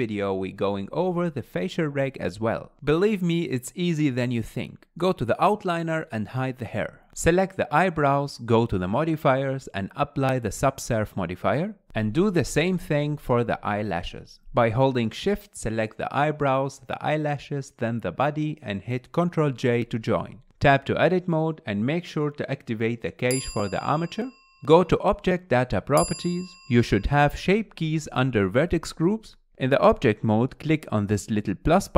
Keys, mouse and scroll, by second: 1.0-1.4 scroll up 4, 1.4-1.9 shift+middle drag, 1.9-3.0 scroll up 1, 3.0 click, 5.6 click, 7.2 click, 7.8 click, 12.3-15.9 drag, 17.1 shift+click, 19.8 ctrl+j, 20.6 Tab, 23.2 click, 23.8 click, 24.7-26.2 middle drag, 26.2 scroll down 2, 26.3-28.1 middle drag, 28.1 click, 31.5-31.9 drag.